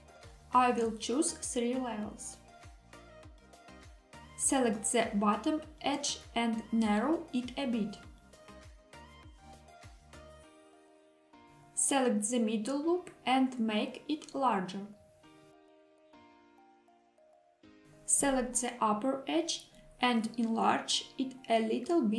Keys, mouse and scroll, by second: 1.2 click, 2.3 click, 4.1 middle click, 4.5 shift+click, 4.7 shift+click, 5.5 middle click, 7.2 s, 10.3 click, 11.6 click, 11.8 click, 13.6 s, 17.5 click, 18.1 click, 18.3 click, 19.4 shift+click, 19.6 shift+click, 21.8 s.